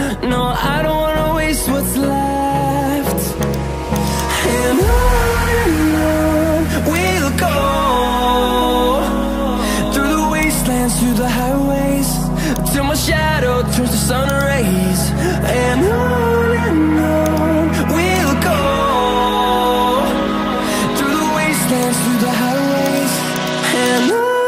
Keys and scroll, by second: 0.8 ctrl+alt+z.